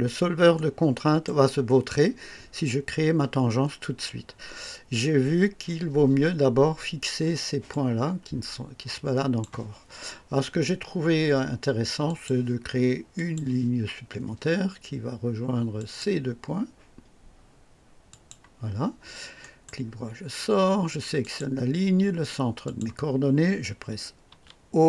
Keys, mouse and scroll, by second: 0.5-1.4 right drag, 7.6-9.6 drag, 12.0 click, 13.1 click, 15.7 click, 18.0 click, 19.4 right click, 21.2 click, 22.6 click, 24.3 typing.